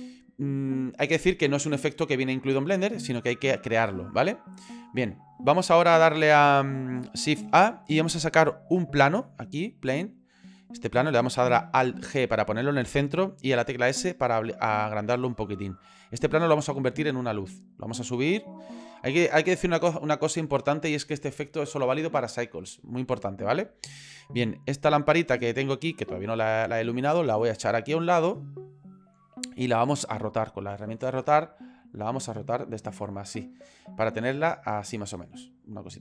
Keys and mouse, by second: 7.6 shift+a, 11.9 alt+g, 13.5 s, 18.9 middle click, 19.5 ctrl+middle click, 20.1 middle click, 24.3 middle click, 27.4-28.4 drag, 29.6 click, 31.8 click, 33.1-35.0 middle drag, 35.5 click.